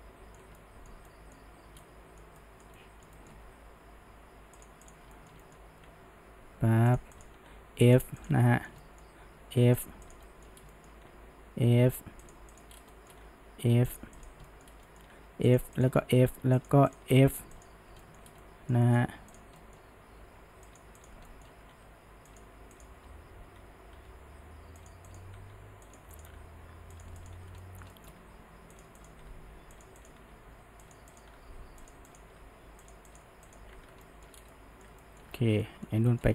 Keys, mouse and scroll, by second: 3.6 g, 4.9 click, 5.2-5.9 shift+middle drag, 5.9 f, 7.2 drag, 7.5 f, 8.2 click, 8.5-9.3 shift+middle drag, 9.3 f, 10.1 click, 10.3-10.6 middle drag, 10.6 scroll down 1, 10.7-11.1 shift+middle drag, 11.1 f, 12.6 click, 12.7 scroll down 1, 12.9 middle click, 13.1 scroll up 1, 13.3 f, 14.2 click, 14.5 shift+middle drag, 14.7 scroll down 2, 14.9 middle drag, 15.2 f, 15.8 drag, 16.0 f, 16.9 click, 17.2 f, 18.0 shift+middle drag, 18.4-19.4 middle drag, 19.4 click, 19.6-20.2 middle drag, 20.2 g, 21.0 drag, 21.3-21.7 shift+middle drag, 21.7 f, 22.8 click, 23.1 d, 24.0 f, 25.1 drag, 25.4 f, 26.2 drag, 26.4 f, 27.2 click, 27.6-28.2 shift+middle drag, 28.2 f, 29.0 click, 29.4 f, 30.0 click, 30.4 f, 31.2 drag, 31.4 f, 32.1 click, 32.4 f, 33.1 click, 33.5 shift+click, 33.8 f, 34.1-34.4 shift+middle drag, 34.4 scroll down 1, 34.5-36.3 middle drag, 35.3-35.7 scroll up 4.